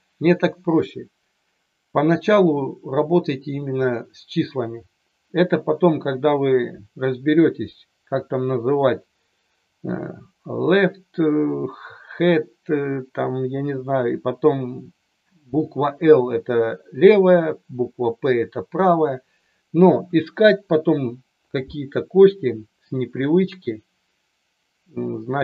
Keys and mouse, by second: 19.9 KP_1, 23.4-25.4 drag.